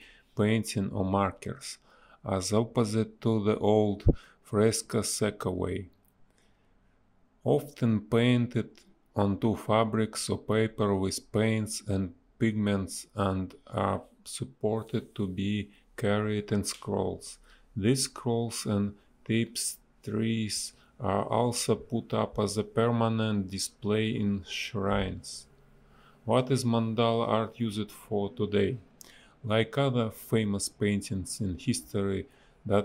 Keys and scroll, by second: 6.0 space, 8.2 space, 13.2 space, 15.0 shift+e, 17.4 a, 18.0 shift+e, 18.6 a, 22.3 space, 23.3 space, 27.2 Delete, 28.5 Delete, 29.0 b, 31.5 space.